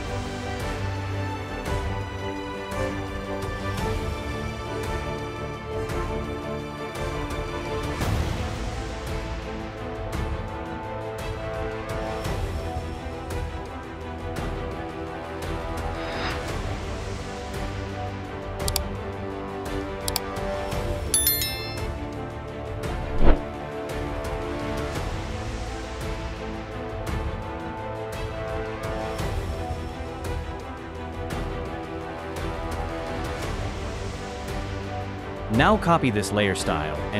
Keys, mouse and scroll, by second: 21.3 double click.